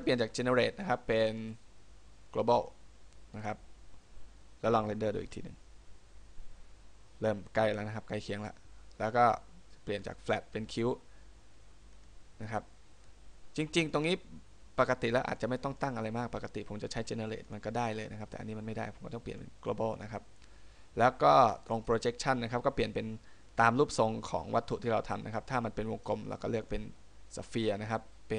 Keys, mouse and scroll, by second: 0.3 click.